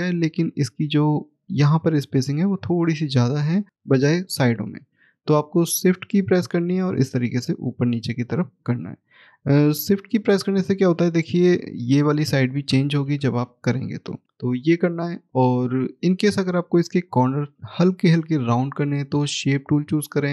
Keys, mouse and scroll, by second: 0.8 scroll up 1, 2.6 middle click, 6.2 shift+click, 8.9-10.4 shift+scroll down 1, 11.1 shift+click, 14.2 click, 14.5 scroll up 1, 14.6 middle click, 15.7 scroll up 1, 17.0 click.